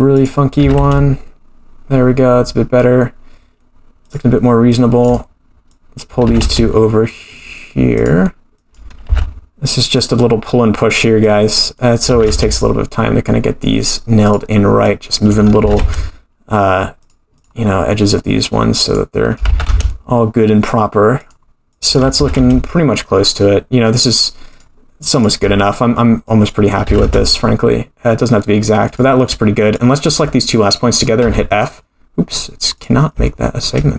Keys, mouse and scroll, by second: 0.1 click, 0.6 g, 4.7-6.0 drag, 6.3 g, 8.6 click, 9.1 g, 10.0 click, 11.2 click, 12.1 g, 14.8 click, 15.6 g, 17.4 click, 18.8 click, 19.5 g, 21.7 click, 22.2 g, 25.0-26.5 drag, 26.8 g, 29.7 click, 30.8-31.1 scroll up 2, 31.2 f, 32.7 click, 33.2 shift+middle click.